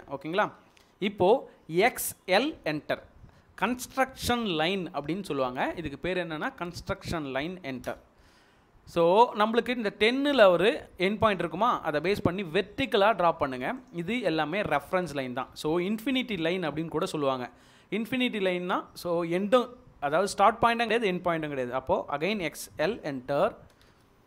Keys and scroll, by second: 4.3-4.6 typing, 7.8 Return, 14.2 Escape, 22.3-23.9 typing.